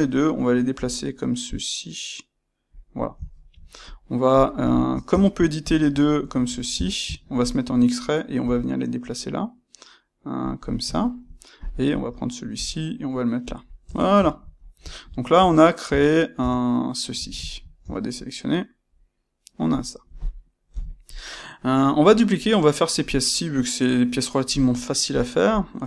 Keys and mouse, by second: 0.7 g, 2.8 click, 3.2 shift+middle click, 3.8 click, 4.3 click, 4.6 shift+click, 5.0 Tab, 5.6 click, 5.8 ctrl+right click, 6.7 Tab, 7.2 ctrl+right click, 8.3 g, 10.5 click, 10.9 shift+middle click, 11.5 click, 12.5 g, 13.5 click, 13.7 Tab, 14.2-25.1 ctrl+middle drag, 15.3 Tab, 17.8 a, 20.7 KP_1, 25.1 click.